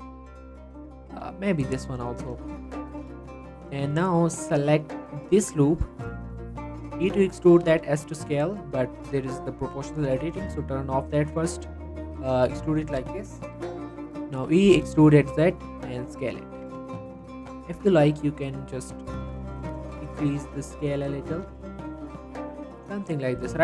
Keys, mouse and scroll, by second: 1.5 alt+shift+click, 2.1 alt+shift+click, 2.5 x, 4.1 click, 4.4 z, 5.0 click, 6.1-6.5 scroll down 3, 6.3 z, 6.5 middle click, 6.7 scroll up 1, 7.0 e, 7.5 right click, 7.7 s, 8.2 scroll up 1, 8.4 right click, 9.6 click, 10.0 s, 11.4 click, 12.6-13.0 scroll down 1, 14.4 e, 14.7 z, 15.5 click, 15.7 s, 16.3 click, 16.5 Tab, 17.0 s, 19.4 click, 19.5 g, 19.8 z, 20.3 click, 20.6 middle click, 21.3 s, 22.3 click, 22.6-23.1 scroll down 2, 22.7 middle click, 23.1 middle click, 23.4 right click.